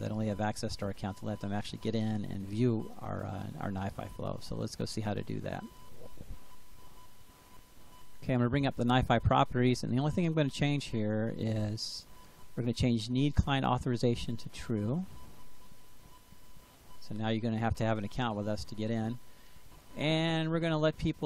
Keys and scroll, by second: 15.2-16.7 typing.